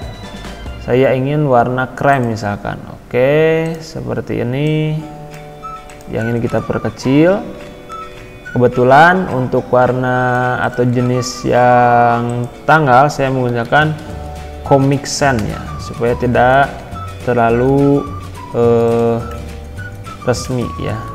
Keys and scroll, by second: 7.0 ctrl+[.